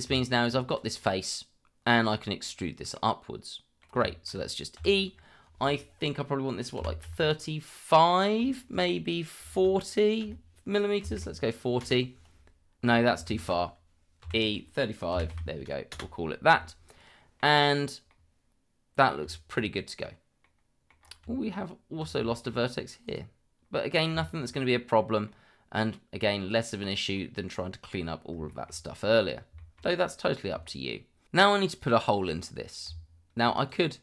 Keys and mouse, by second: 0.0 Tab, 0.7 click, 2.9 middle click, 4.1 shift+middle click, 4.8 e, 6.7 KP_3, 7.0 KP_5, 9.4 BackSpace, 11.0 KP_4, 11.1 KP_0, 11.8 Return, 13.3 ctrl+z, 14.2 e, 15.1 KP_3, 15.3 KP_5, 15.9 Return, 16.9-17.4 middle drag, 18.1-19.1 middle drag, 19.2 Tab, 20.4-20.9 middle drag, 22.3 shift+middle drag, 23.0 click, 25.2-27.1 middle drag, 28.5 shift+middle drag, 29.5 shift+middle drag, 30.0 click, 31.4 middle click, 31.7 click, 32.9 Tab, 33.7 click.